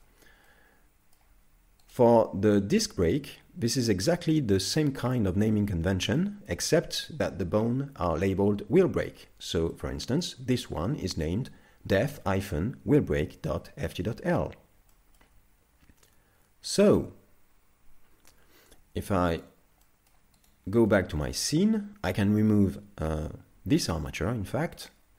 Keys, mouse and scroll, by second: 0.5 middle click, 1.9 right click, 4.4-4.9 scroll up 2, 6.1 shift+middle click, 9.7 middle click, 14.4-14.9 scroll down 2, 14.9 shift+middle click, 16.3 ctrl+Tab, 17.9 KP_Divide, 19.5 right click, 19.9 middle click, 20.5 right click, 20.9 middle click, 22.1 x.